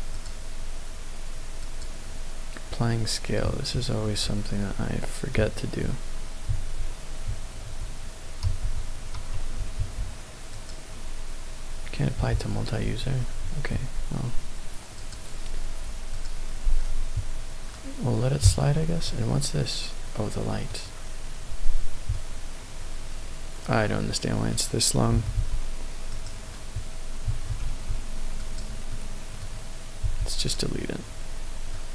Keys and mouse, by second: 1.6 click, 4.1 Tab, 5.3 a, 6.4 a, 7.5 ctrl+a, 8.4 ctrl+a, 9.1 Tab, 9.7 ctrl+a, 12.3 ctrl+a, 12.6 ctrl+a, 13.5 Escape, 14.9 click, 16.1 click, 19.0-20.7 middle drag, 22.1-24.5 middle drag, 25.1 s, 25.3 x, 26.0 right click, 27.2 s, 27.6 x, 28.3 click, 28.9 middle click, 30.0 x, 31.7-31.9 middle drag.